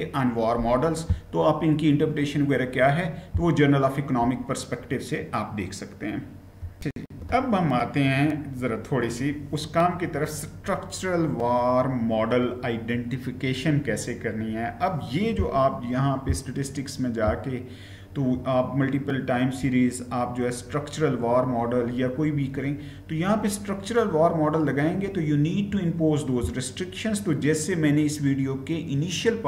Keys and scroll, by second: 6.7 shift+F9.